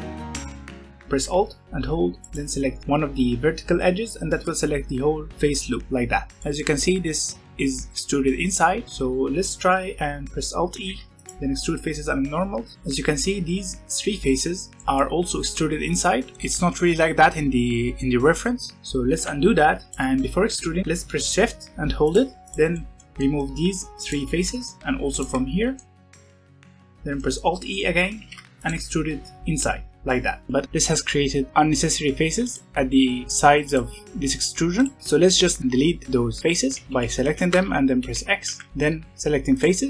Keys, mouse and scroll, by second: 0.0 3, 0.3 middle click, 0.8 scroll up 1, 1.0 shift+middle click, 2.2 alt+click, 6.3-7.8 scroll up 3, 6.4 middle click, 10.8 alt+e, 14.8 middle click, 15.1-16.3 scroll up 1, 16.3-18.7 scroll up 1, 18.7-19.1 scroll down 1, 19.1 ctrl+z, 19.9 alt+click, 22.0 shift+click, 22.4 shift+click, 22.6-24.0 middle drag, 24.0 shift+click, 24.3 scroll down 3, 24.6 shift+middle click, 25.0 shift+click, 25.4 scroll up 1, 25.7 shift+middle click, 26.0 shift+click, 26.1 shift+middle click, 26.6 middle click, 26.8 scroll down 1, 26.9-28.2 shift+middle drag, 28.2 alt+e, 30.5 middle click, 30.6 3, 30.8 click, 31.4 click, 32.4 click, 33.6 click, 34.8 click, 35.0 click, 36.7 x, 37.9 Escape, 38.4 x.